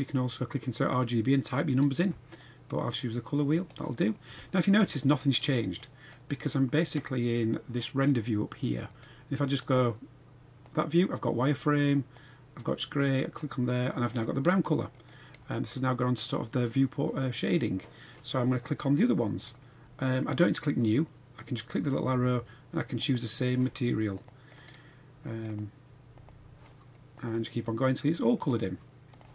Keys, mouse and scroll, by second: 10.6 click, 10.6 click, 12.0 click, 13.6 click, 18.8 click, 21.9-23.1 drag, 24.1 click, 25.5 click, 27.1 click, 28.4-29.2 drag.